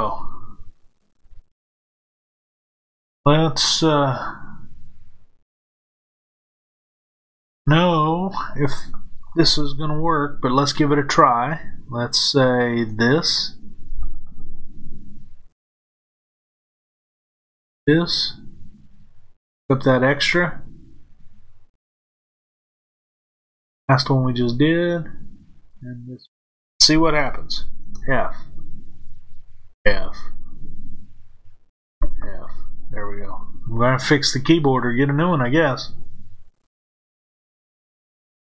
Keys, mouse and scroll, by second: 3.6-12.9 middle drag, 12.9 click, 17.6 shift+click, 19.4 shift+click, 23.2 shift+click, 25.6 shift+click, 27.8 f, 36.3-38.5 middle drag.